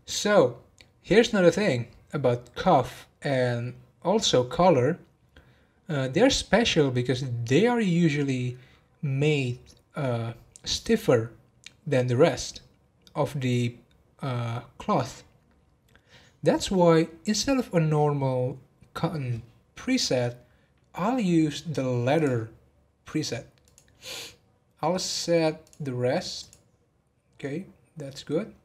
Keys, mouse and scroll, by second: 21.3-22.1 scroll up 1, 22.1-25.1 drag, 25.6-28.6 drag.